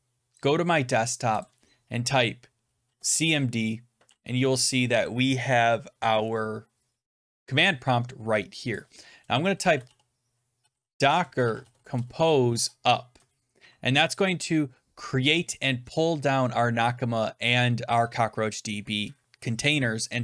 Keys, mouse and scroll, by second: 0.4 click, 1.3 click, 2.8 Return, 8.6-13.7 drag, 9.4-12.9 typing, 13.1 Return.